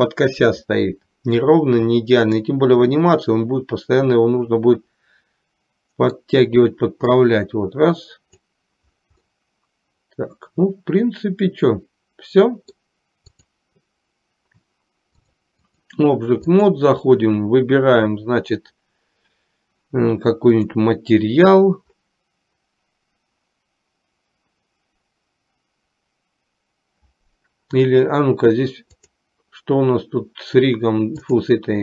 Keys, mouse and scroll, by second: 2.5-6.3 middle drag, 7.4-8.6 drag, 9.4-13.1 middle drag, 13.5 click, 15.3-16.0 drag, 16.6 click, 29.6 click.